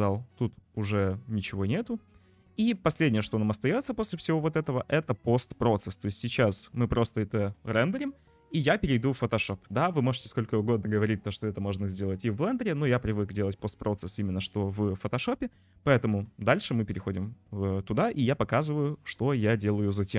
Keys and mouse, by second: 3.0 click.